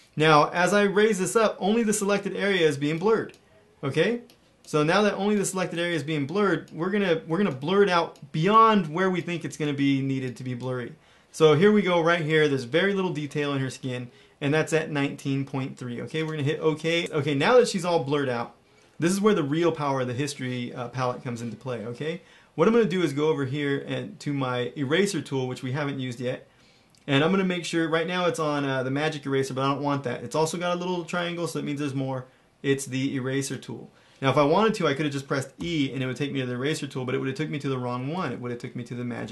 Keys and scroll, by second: 17.8 ], 35.5 e, 38.1 shift+e, 39.1 shift+e.